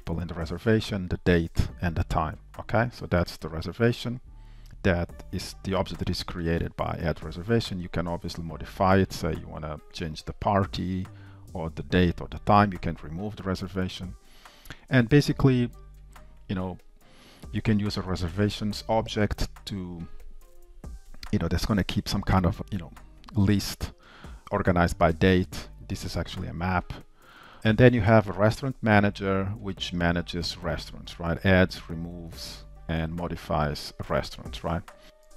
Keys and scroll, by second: 35.0 Down, 35.3 Up.